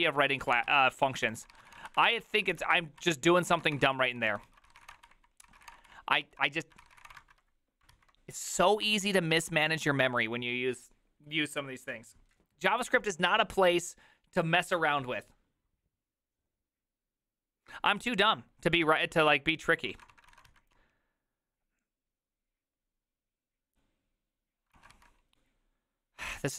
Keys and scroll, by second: 0.0-7.6 typing, 4.5 ctrl+u, 5.5 ctrl+c, 5.9 ctrl+d, 5.9 Return, 6.3 ctrl+u, 8.0 alt+{, 8.9 alt+[, 19.9 alt+{, 19.9 ctrl+a, 20.1 2, 20.3 ctrl+a, 20.5 3, 25.0 ctrl+a, 25.0 4.